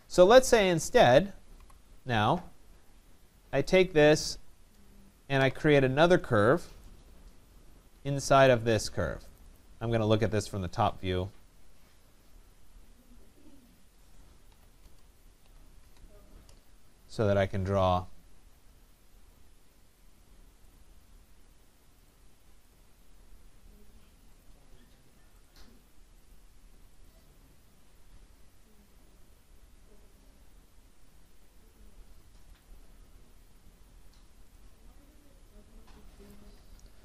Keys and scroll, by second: 1.5 Delete, 14.8 Return.